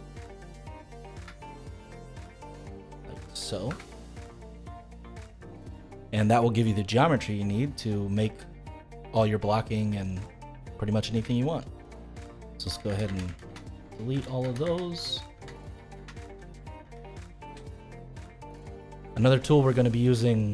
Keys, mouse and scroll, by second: 0.8 click, 1.1 e, 3.1 click, 3.7 e, 4.7-5.1 scroll down 3, 5.1-10.0 middle drag, 10.0-10.4 scroll up 2, 10.4-12.6 middle drag, 12.6 ctrl+z, 12.9 ctrl+z, 13.0 ctrl+z, 13.2 ctrl+z, 13.4 ctrl+z, 13.8 ctrl+z, 14.1 ctrl+z, 14.4 ctrl+z, 14.6 ctrl+z, 14.9 ctrl+z, 15.3 ctrl+z, 15.6 ctrl+z, 15.9 ctrl+z, 16.2 ctrl+z, 16.5 ctrl+z, 16.8 ctrl+z, 17.8-19.1 middle drag, 19.1-19.6 scroll up 2, 19.6-20.5 middle drag.